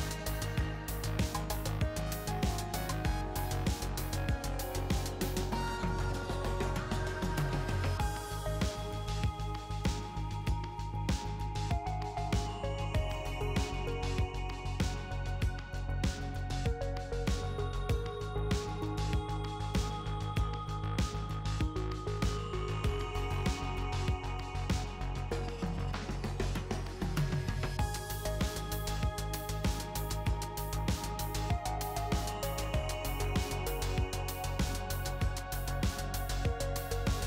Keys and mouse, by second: 2.1-3.8 drag, 5.0-7.8 drag, 7.8 ctrl+r, 9.0 ctrl+r, 10.9-14.4 drag, 13.0 e, 15.1 ctrl+r, 16.8 ctrl+r, 18.6-19.8 drag, 19.3 ctrl+r, 19.8-21.5 drag, 22.2 ctrl+r, 25.1-27.6 middle drag, 27.6 ctrl+r, 29.6 ctrl+r, 33.0-34.5 middle drag, 35.4 middle click, 36.7 middle click.